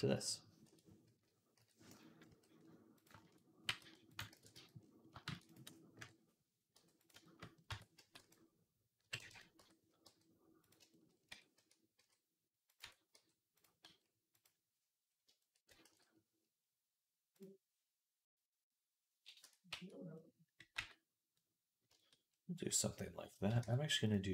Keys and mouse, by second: 2.1 s, 3.5 g, 4.1 ctrl+a, 5.1 shift+d, 5.8 KP_1, 6.6 g, 7.0-10.6 shift+drag, 7.5 Tab, 7.8 a, 8.1 r, 9.4 Tab, 9.9 g, 10.6-22.3 shift+middle drag, 11.1 Tab, 11.4 a, 11.8 s, 12.6 Tab, 13.0 g, 13.7 s, 15.7 ctrl+s, 19.2 Tab, 19.5 a, 20.6 f, 22.5 click, 22.5 f, 23.4 Tab, 23.9-24.3 drag.